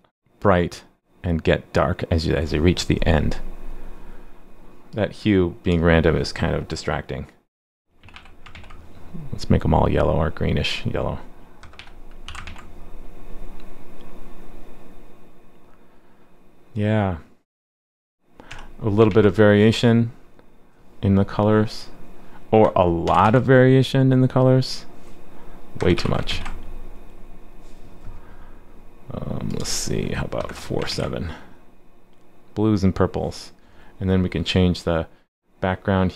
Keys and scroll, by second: 8.5 super+s, 12.4 super+s, 19.1 super+s, 23.2 super+s, 26.3 super+s, 30.9 super+s.